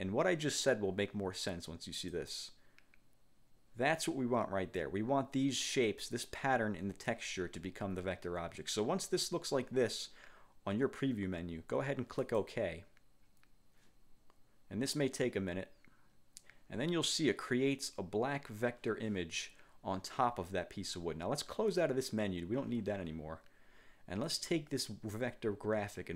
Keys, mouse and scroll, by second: 2.3 click, 12.3 click, 21.8 click, 24.3-26.1 drag.